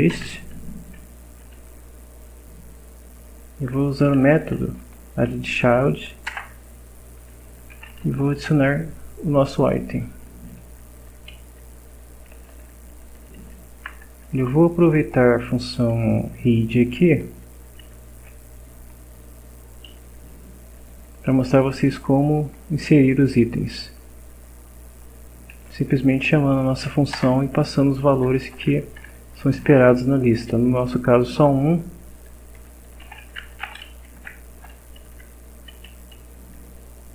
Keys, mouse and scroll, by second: 0.1 Return, 3.6 a, 4.1 d, 6.3 Return, 7.3-8.5 typing, 9.8 Up, 10.1 Down, 11.4 Up, 11.8 Down, 12.3 Home, 12.9 shift+Down, 13.2 shift+End, 13.4 shift+Down, 16.7 Up, 17.8 Home, 20.7 shift+Down, 21.1 shift+End, 21.9 shift+Delete, 22.5 Return, 25.5 a, 25.9 d, 27.1 Return, 28.5 shift+0, 29.1 shift+Left, 29.3 shift+space, 29.7 shift+Left, 32.8-34.1 typing, 35.1 shift+End, 35.7 Up, 36.2 Down.